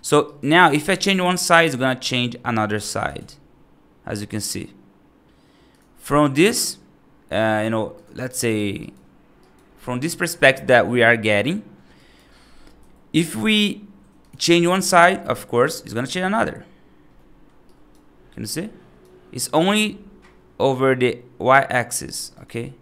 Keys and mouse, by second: 0.1 right click, 0.8 g, 2.0 x, 2.8 g, 6.3 F2, 6.4 click, 7.1 x, 7.8 click, 8.1 right drag, 8.7 right drag, 9.3 right click, 11.8 right click, 12.6 F3, 14.0 click, 14.5 g, 17.0 middle click, 17.6 right click, 18.4 right click, 21.8 click, 22.2 click.